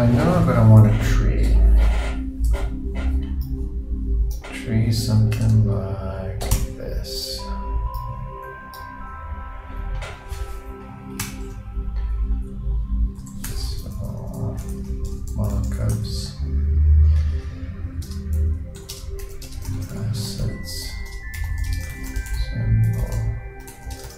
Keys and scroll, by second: 14.9 shift+BackSpace, 15.1 shift+m, 19.7 shift+space, 19.8 shift+a, 21.9 shift+space, 21.9 shift+s, 24.0 shift+space.